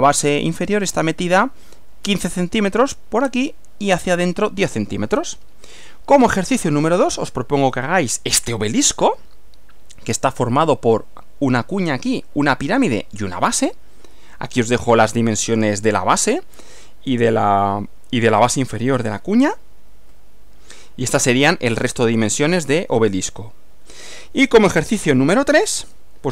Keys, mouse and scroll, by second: 4.6-4.9 scroll down 2, 6.4 Right, 14.0 Right, 20.1 Right, 25.9 Right.